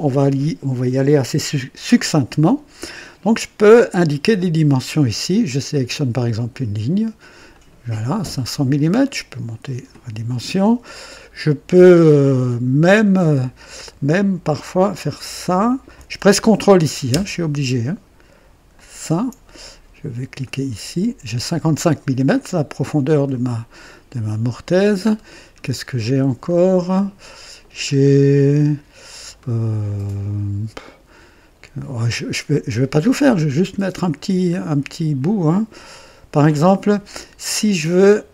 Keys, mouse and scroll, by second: 5.4 click, 7.4 click, 8.9-10.0 drag, 10.6-11.1 scroll down 1, 11.9-12.6 scroll up 4, 13.1 scroll up 2, 15.1 click, 18.6 ctrl+click, 20.3 click, 22.2-24.7 drag, 25.0-25.7 scroll down 2, 26.4 middle click, 26.7 click, 27.1 middle click, 27.5 click, 27.8 scroll up 1, 28.0-28.7 scroll down 4, 29.3-33.0 middle drag, 33.3-33.6 scroll up 2, 34.1 scroll down 2, 37.5 scroll down 2.